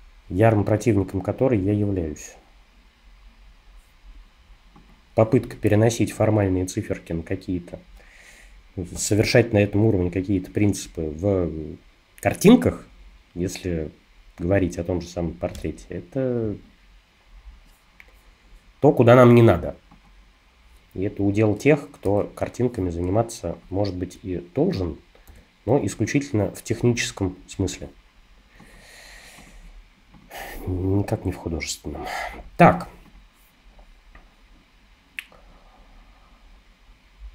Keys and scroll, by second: 22.1 super+d, 25.3 super+-.